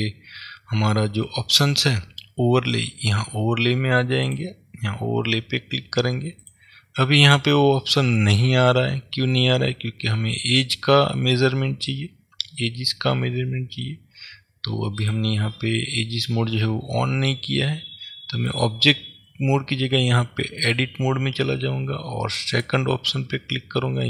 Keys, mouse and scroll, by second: 4.4-22.8 drag.